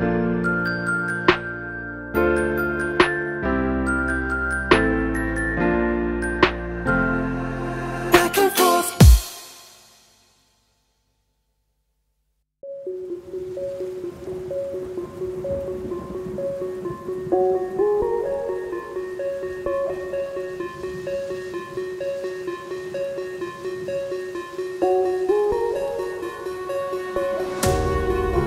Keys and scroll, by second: 6.5 ctrl+z, 7.4 ctrl+z, 9.0 ctrl+z.